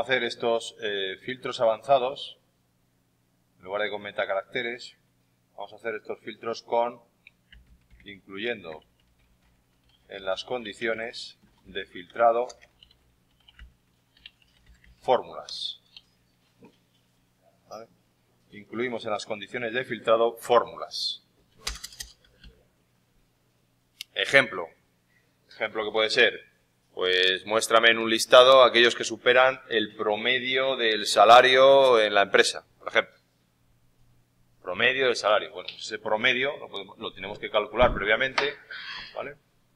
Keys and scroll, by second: 7.2-16.4 typing.